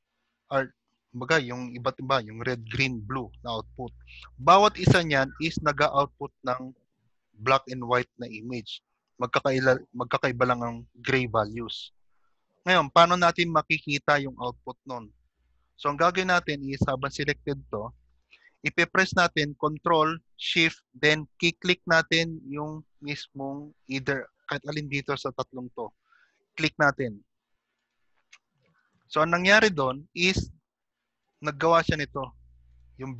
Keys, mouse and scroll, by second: 5.0 click, 6.3 click, 14.1 click, 14.4 g, 16.0 middle click, 17.1 click, 17.1 g, 27.9 ctrl+shift+click, 30.4 click, 30.4 g, 31.2 click, 31.9 click, 32.3 g.